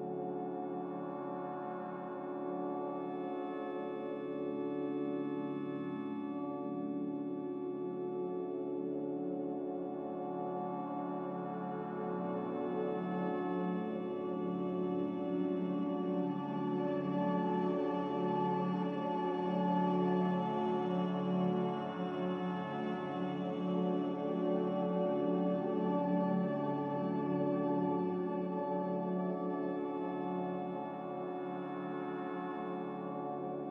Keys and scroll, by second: 4.8 ctrl+z, 9.6 Delete, 9.6 b, 11.1 n, 13.2 Escape, 25.6 ctrl+z.